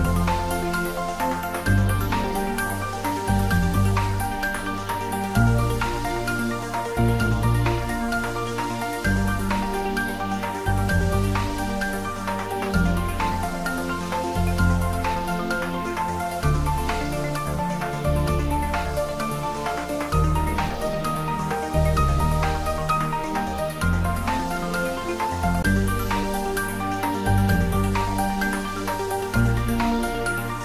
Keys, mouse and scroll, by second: 1.3 click, 3.4 click, 4.7 ctrl+r, 5.9 click, 7.6-8.0 scroll down 1, 8.0 middle click, 8.7-9.2 scroll up 1, 9.9 ctrl+r, 10.9 click, 13.0 ctrl+r, 13.6 click, 15.6 ctrl+r, 16.5 click, 17.6-17.9 scroll down 1, 17.9 middle click, 19.1 ctrl+r, 21.1 click, 22.4-22.9 scroll up 1, 23.4 ctrl+r, 23.8 click, 25.4 scroll down 1, 25.7 middle click, 26.4-26.8 scroll up 1, 26.8-28.4 middle drag, 28.4 ctrl+r, 28.9 click, 29.1 click, 30.5 ctrl+r.